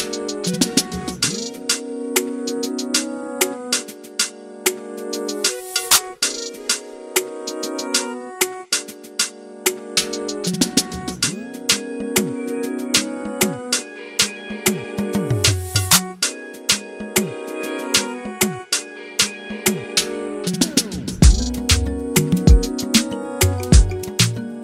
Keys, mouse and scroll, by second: 4.2-6.6 shift+right drag, 6.7 right click, 7.1 click, 9.8 middle click, 11.0-12.8 ctrl+right drag, 12.8 click, 13.4 ctrl+right click, 14.2 click, 15.0-16.1 ctrl+right drag, 16.1 click, 16.8 right click, 16.9 middle click, 17.2 right click, 17.6 click, 18.3 shift+right click, 19.2 click, 20.1 f, 20.5 click.